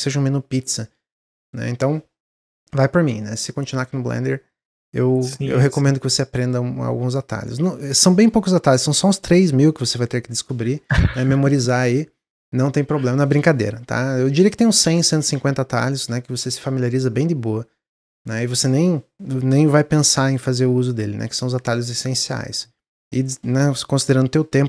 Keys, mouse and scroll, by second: 1.4-3.2 middle drag, 3.2 click, 4.9 s, 5.8 click, 6.2 middle click, 7.1-10.2 drag.